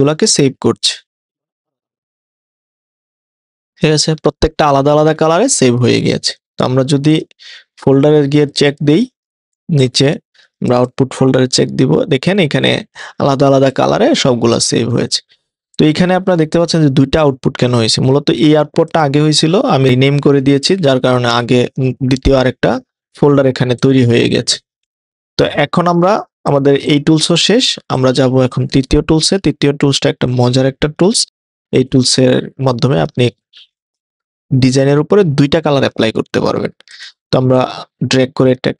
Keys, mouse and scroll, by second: 6.2 click, 7.1 click, 8.5 click, 8.6 click, 10.7 click, 10.8 click, 12.3 click, 13.7 click, 25.8 click, 26.5 click, 26.9 click, 32.9 click.